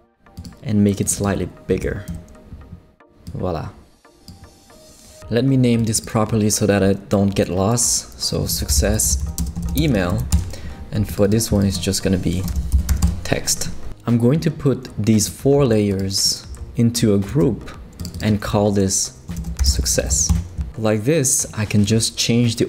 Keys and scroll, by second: 8.3-10.4 typing, 12.3-13.4 typing, 17.3 shift+super+g, 19.1-20.4 typing.